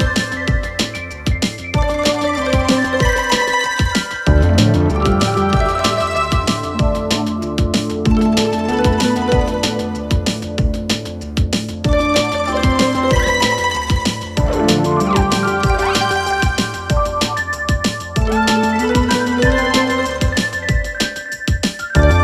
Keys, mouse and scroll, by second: 1.2-1.7 drag, 3.3 Tab, 6.0 click, 7.0-7.9 alt+scroll up 1, 11.6 alt+scroll up 1, 12.0-12.5 click, 12.3 space, 12.6-13.0 alt+scroll up 1, 14.6 click, 15.8 alt+Tab, 19.9-21.8 drag.